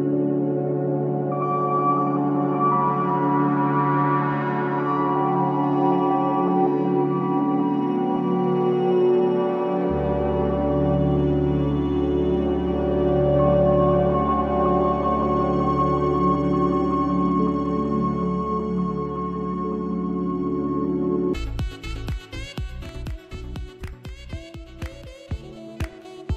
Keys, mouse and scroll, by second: 4.1 click, 4.1 click, 4.6 j, 4.6 click, 7.6 scroll down 1, 8.2-9.5 scroll, 11.7 v, 12.5-12.8 scroll down 1, 18.7 scroll up 1, 19.5 space, 19.7 click, 20.0 space, 23.8 scroll down 1.